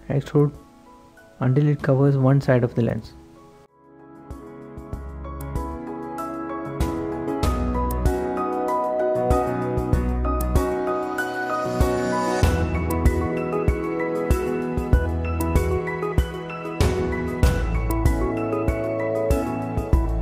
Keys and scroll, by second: 2.7 typing, 4.2 e, 6.6-9.1 typing, 10.2-11.3 typing, 12.5-20.2 typing.